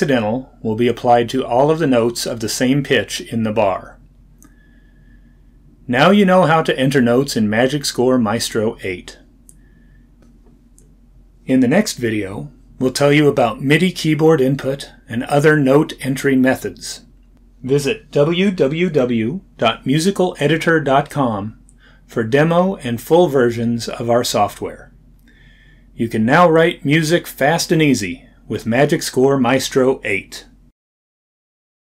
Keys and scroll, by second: 1.3 d.